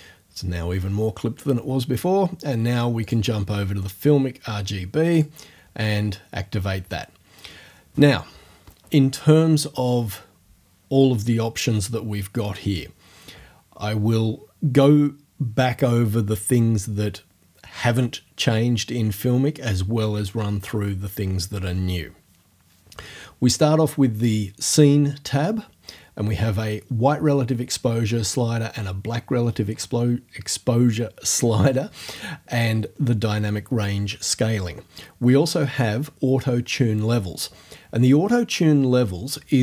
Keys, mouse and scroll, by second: 3.0 click, 5.2 click.